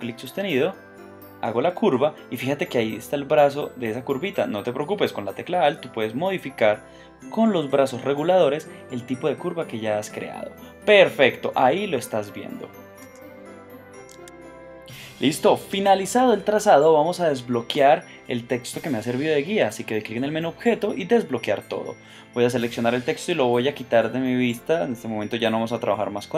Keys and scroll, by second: 4.7 space, 14.1 super+a, 14.9 a.